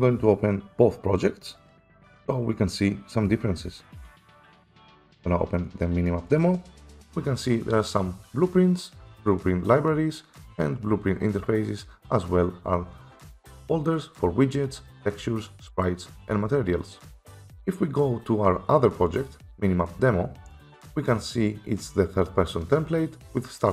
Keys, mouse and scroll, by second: 4.4 click, 4.5 click, 6.4 click, 6.7 click, 19.5 click, 20.9 click.